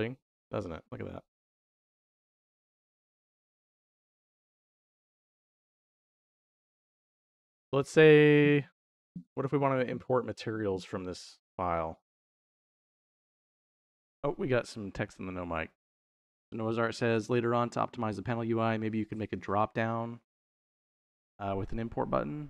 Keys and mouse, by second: 2.6 middle click, 3.0-5.2 shift+middle drag, 5.5 click.